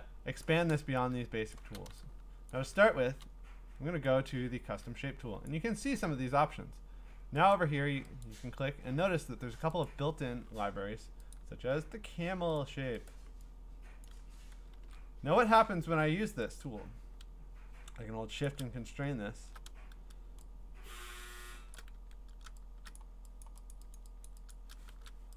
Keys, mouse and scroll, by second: 0.2 scroll, 0.4-2.3 click, 1.4-1.9 scroll, 2.5-3.2 click, 2.6 click, 2.7 click, 5.5 click, 7.5 click, 8.2 click, 9.8 click, 10.6 scroll, 11.3 click, 12.6 click, 13.1 click, 14.0 click, 14.8 ctrl+z, 15.4 scroll, 18.4 shift+click, 18.9-19.2 scroll, 21.7-24.8 shift+click, 21.9 d, 22.9 click, 23.4 click, 23.7 click, 23.9 click, 24.3 click, 24.5 click, 24.9 !.